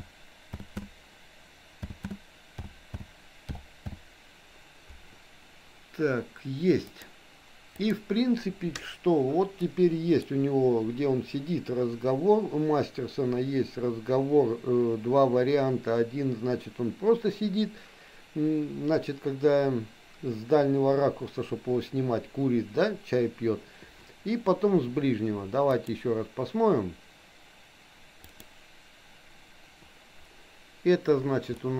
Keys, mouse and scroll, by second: 9.6 middle click, 25.9-29.9 drag, 31.5 middle click.